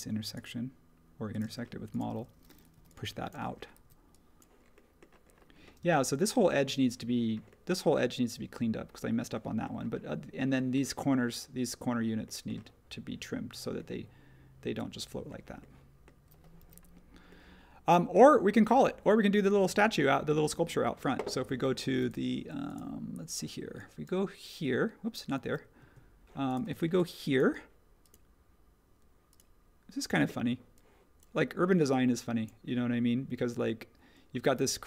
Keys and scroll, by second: 1.4 space, 16.6 h, 25.8 super+z.